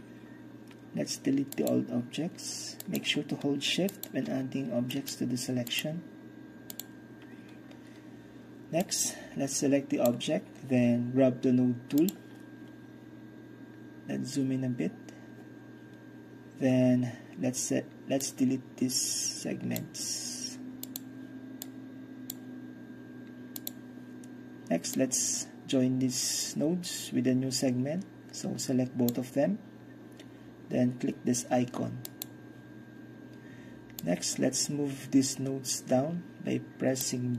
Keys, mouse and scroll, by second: 1.6 click, 6.8 click, 8.9-10.6 drag, 12.1 click, 13.8-16.6 scroll up 1, 16.6-18.3 scroll up 1, 18.3-24.6 drag, 25.0-30.0 drag, 32.1-33.6 drag, 34.1-37.3 drag.